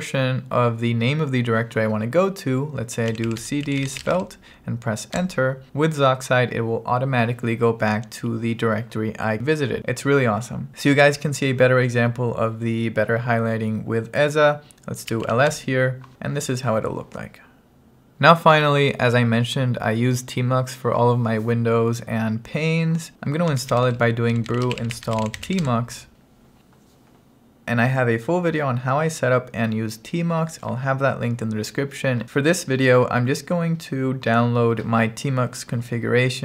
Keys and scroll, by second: 3.2-4.5 typing, 5.2 Return, 10.7 Return, 15.2 l, 15.6 Return, 23.3-26.0 typing.